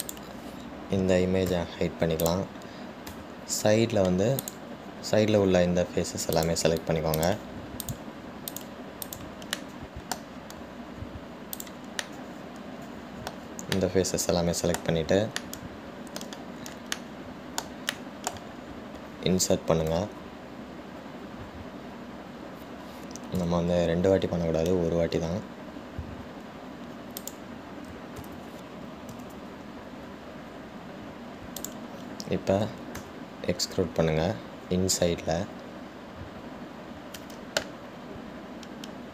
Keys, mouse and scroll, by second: 0.7 Tab, 1.2 click, 5.6 click, 7.9 click, 8.4 click, 9.0 shift+click, 9.7 shift+click, 10.3 shift+click, 10.8 middle click, 11.6-12.1 scroll down 1, 12.7 shift+click, 13.3-19.9 shift+middle drag, 19.9-21.3 scroll up 1, 29.6 ctrl+z.